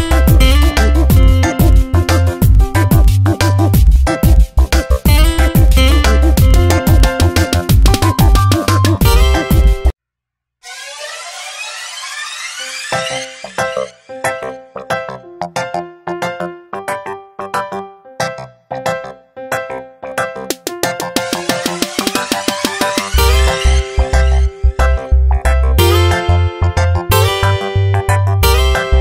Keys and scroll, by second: 3.7 x, 10.7 x, 17.3 Tab, 19.0 v, 19.3 Tab, 21.7 Tab, 25.1 Tab, 28.4 t.